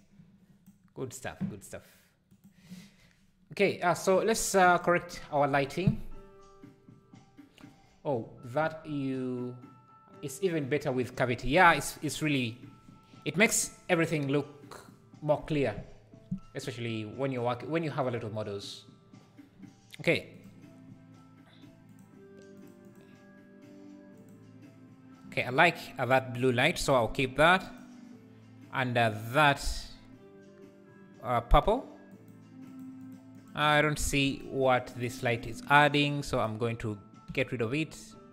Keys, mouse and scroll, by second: 4.1 click, 21.9 click, 22.5 click, 22.8 click, 24.2 click, 27.6 click, 32.1 click, 32.7 click, 33.0 click, 33.3 click, 33.6 click, 33.9 click, 34.2 click, 34.6 click, 34.9 click, 35.1 click, 35.4 click, 35.8 click, 36.4 click, 37.3 Delete.